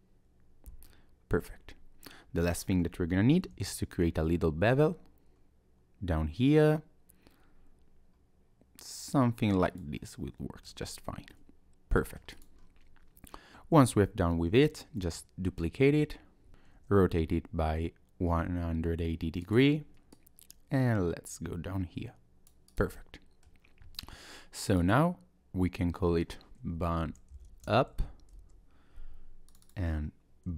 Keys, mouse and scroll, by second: 0.9 middle click, 1.6 Tab, 3.5 ctrl+b, 10.0 middle click, 10.7 Tab, 11.0 scroll down 1, 11.3 middle click, 12.3 click, 12.6 scroll down 1, 13.5 ctrl+z, 15.0 shift+d, 16.7 r, 20.1 click, 22.7 click, 23.0 middle click, 24.6 click, 24.8 click, 29.5 click, 29.7 click.